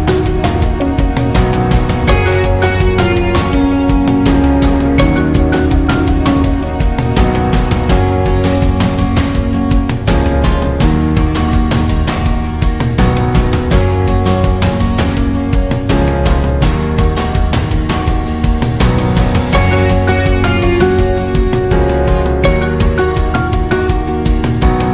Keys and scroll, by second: 1.4 Delete.